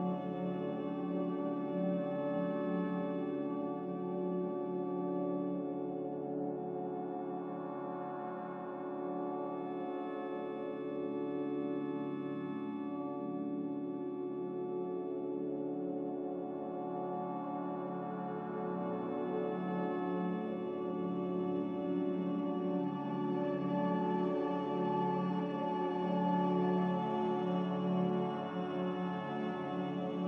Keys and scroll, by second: 3.5 z, 5.2-6.1 typing, 8.7-10.1 typing, 9.1 ctrl+z.